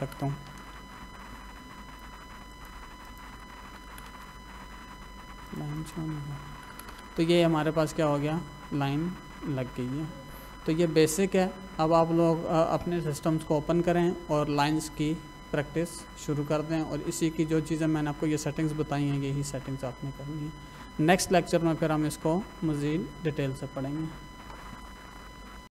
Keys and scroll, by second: 0.5 l, 0.7 space, 3.4 Escape, 4.1 space, 6.5 Escape.